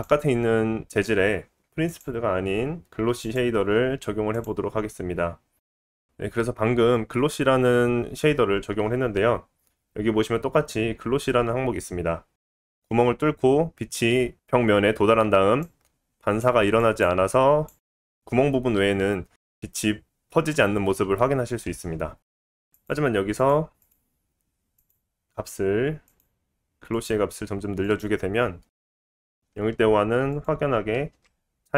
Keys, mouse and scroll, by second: 0.4 click, 0.6-3.3 middle drag, 3.3-6.5 drag, 6.5-12.3 middle drag, 12.3-31.7 drag, 22.3 ctrl+z, 28.6 ctrl+z.